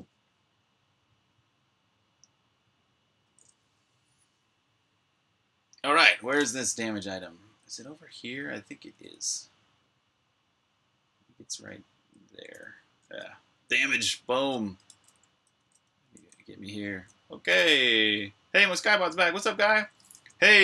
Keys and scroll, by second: 6.5-9.6 typing, 11.0-12.1 typing, 16.4-18.0 typing.